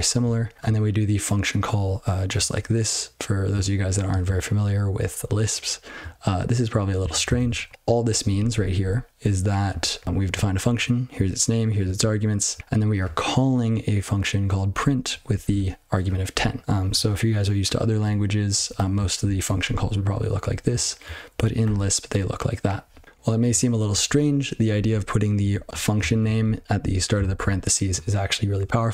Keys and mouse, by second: 0.1 ctrl+f, 0.5 ctrl+f, 6.9 ctrl+n, 7.1 ctrl+a, 7.2 ctrl+space, 7.3 ctrl+n, 7.4 ctrl+w, 7.6 ctrl+p, 7.7 ctrl+f, 8.0 ctrl+f, 8.3 ctrl+f, 8.5 ctrl+f, 8.7 ctrl+f, 9.1 ctrl+p, 9.6 ctrl+a, 9.9 ctrl+f, 10.3 ctrl+f, 10.5 ctrl+f, 10.5-11.1 ctrl+f, 11.8 ctrl+n, 12.5 ctrl+a, 12.6 ctrl+f, 14.7 ctrl+f, 15.2 ctrl+f, 17.6 ctrl+{, 18.6 BackSpace, 19.2 ctrl+f, 19.4 ctrl+f, 19.6 ctrl+f, 20.5 ctrl+b, 20.7 ctrl+b, 21.6 ctrl+(, 23.8 ctrl+f, 24.7 ctrl+f, 25.5 ctrl+b, 26.4 ctrl+g, 26.8 ctrl+b, 27.2 ctrl+alt+f.